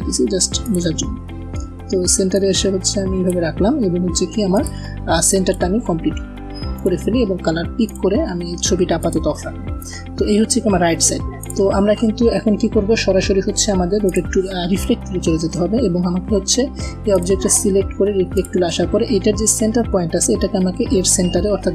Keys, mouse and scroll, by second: 0.9 alt+scroll up 1, 2.2-3.1 drag, 4.8-5.1 alt+scroll down 1, 5.1 space, 5.2 click, 7.7 click, 9.3 v, 10.3 typing, 11.1 click, 13.9 click, 16.7 v, 17.0 click.